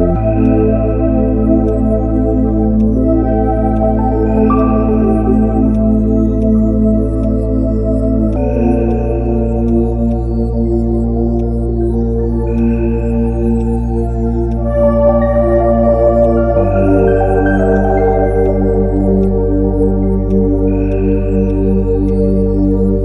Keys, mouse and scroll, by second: 13.6 ctrl+click, 18.4 ctrl+click.